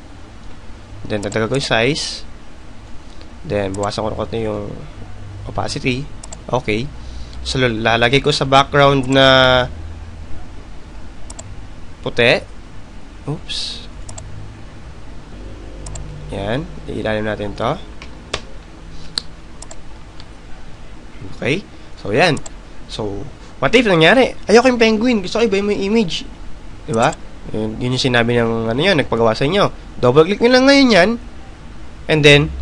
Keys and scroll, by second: 22.9 ctrl+j, 24.6 alt+BackSpace.